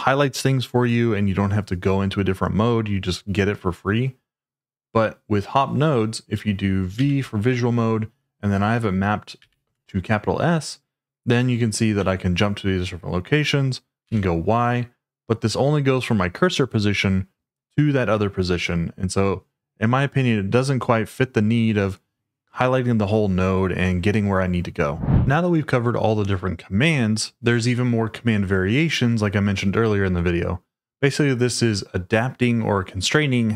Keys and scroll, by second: 6.9 v, 9.3 shift+s, 14.0 y.